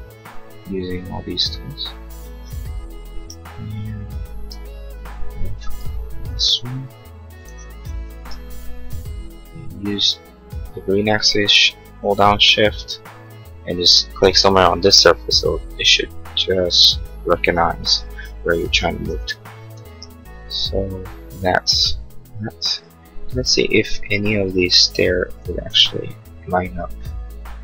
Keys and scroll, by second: 4.3 space, 6.0 m, 23.3 space, 24.6 m.